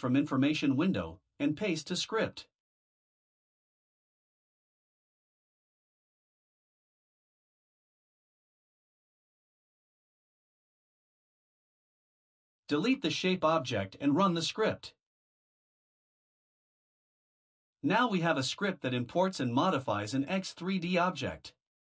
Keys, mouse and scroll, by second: 1.3 click, 2.9 shift+click, 5.3 ctrl+c, 6.4 click, 7.1 Return, 7.4 Return, 8.2 ctrl+v, 9.5 click, 12.0 BackSpace, 13.9 Delete, 16.9 click, 19.6 click, 21.7 Return.